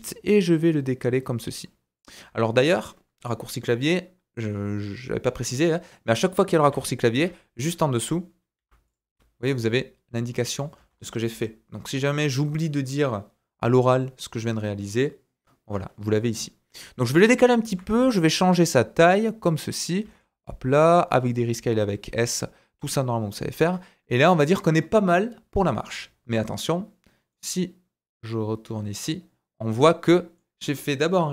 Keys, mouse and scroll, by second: 2.2-5.9 middle drag, 6.6 g, 8.6 g, 10.8 ctrl+z, 17.7 s, 20.0 s, 21.9-23.6 ctrl+middle drag, 23.7-30.3 middle drag.